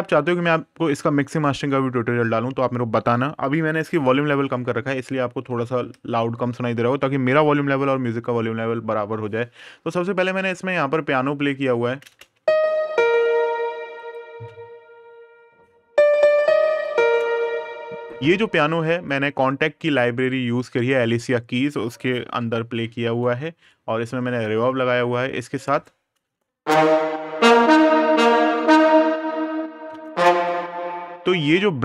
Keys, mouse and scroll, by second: 11.8 space, 13.7 click, 17.8 click, 22.3 super+KP_Add, 22.9 super+KP_Subtract, 24.1 click, 25.5 right click, 26.0 space, 29.7 space, 30.1 click.